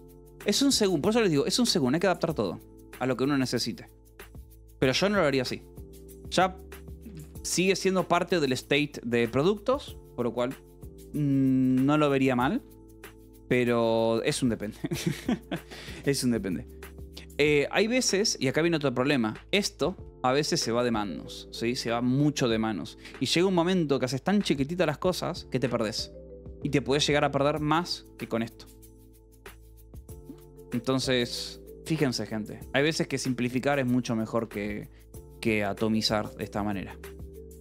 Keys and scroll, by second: 0.0-1.9 typing, 7.4 k, 7.9 j, 8.5 j, 9.1 Escape, 11.2 j, 11.5 k, 12.1 j, 12.6 Escape, 14.4 k, 15.0 j, 17.0-19.2 typing, 20.2 shift+v, 23.0 Escape, 27.3 k, 29.7-30.6 typing, 32.0-33.7 typing.